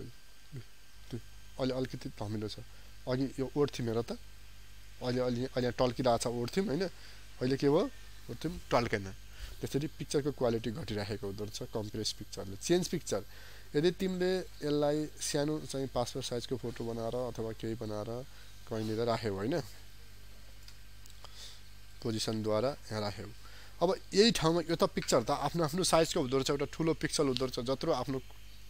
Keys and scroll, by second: 2.9 ctrl+z, 7.2 ctrl+y, 10.2 ctrl+z.